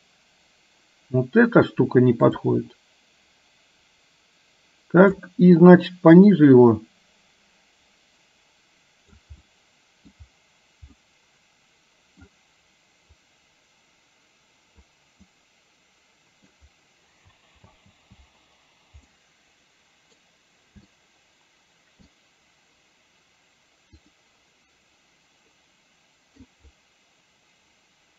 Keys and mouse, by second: 2.6-5.2 drag, 6.2-9.2 drag, 9.6-10.2 middle drag, 11.1-12.3 middle drag, 13.2-14.8 drag, 15.3-16.6 middle drag, 17.7 space, 19.2-20.3 middle drag, 21.1-22.2 shift+middle drag, 25.6-26.6 middle drag, 26.8-28.1 middle drag.